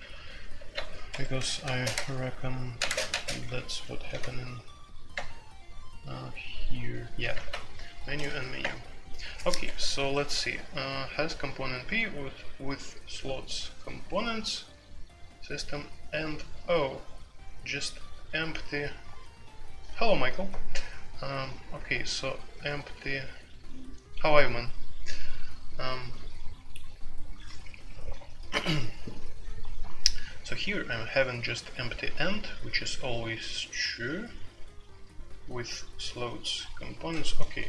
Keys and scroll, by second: 0.5 alt+1, 1.1 Escape, 1.7-4.2 typing, 1.9 Tab, 2.8 Tab, 5.1 Return, 7.3 alt+2, 7.3-10.1 typing.